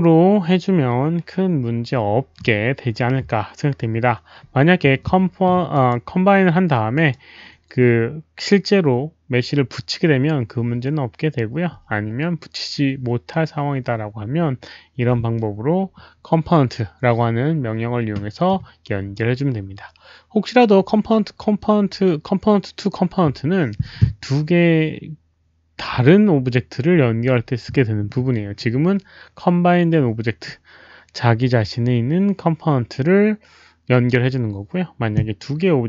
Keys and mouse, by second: 1.8 alt+middle click, 1.8 click, 5.7 click, 6.9 click, 7.1 alt+middle click, 7.9 click, 16.5 click.